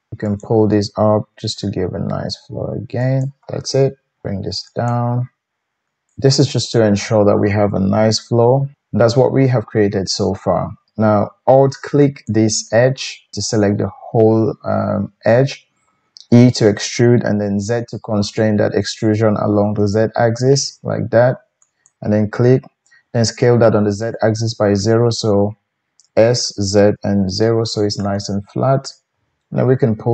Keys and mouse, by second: 0.2 click, 0.4-5.5 middle drag, 1.3 g, 5.5 g, 12.2 alt+click, 16.3 e, 21.6-22.0 z, 22.0-30.1 middle drag, 26.0 s.